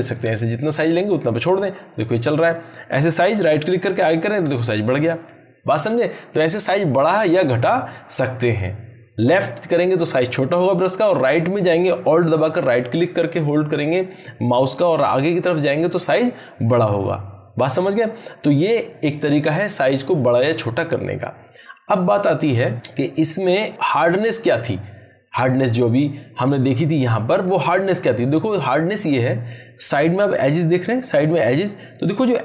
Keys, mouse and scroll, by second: 1.7-2.7 drag, 3.5-4.4 alt+right click, 4.7-5.3 drag, 27.1 click, 31.0-32.3 drag.